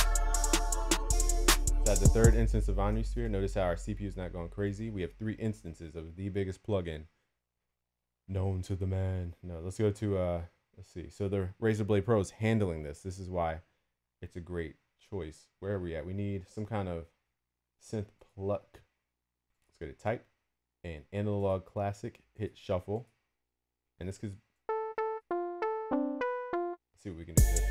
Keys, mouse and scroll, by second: 3.7 F1, 3.8 F1, 4.1 F1.